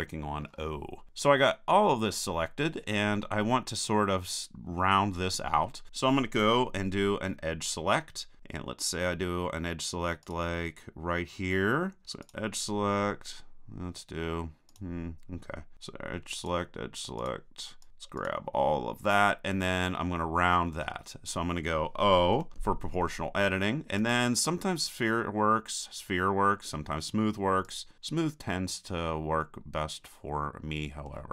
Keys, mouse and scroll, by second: 10.3-12.1 right drag, 12.3-19.9 right drag, 22.3 o, 24.0-25.9 drag, 29.4-31.3 middle drag.